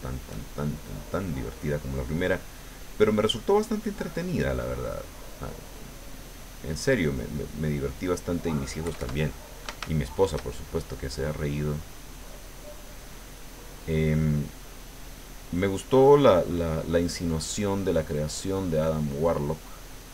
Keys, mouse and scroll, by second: 0.8 middle click, 2.4 middle click, 3.5-8.1 drag, 8.8 KP_Add, 9.9 shift+middle click, 10.6-18.4 shift+drag, 18.6 middle click, 19.7-20.1 drag.